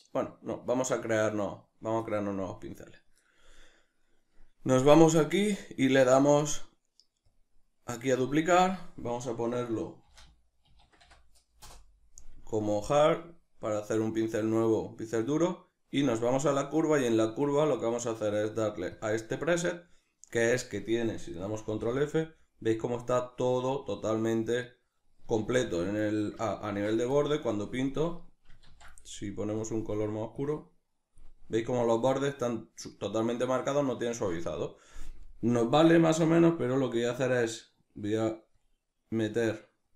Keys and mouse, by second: 11.7-26.5 drag, 11.7 Return, 21.6 shift+f, 26.5 ctrl+middle click, 27.1-39.9 drag, 28.7 ctrl+z, 34.1 ctrl+z.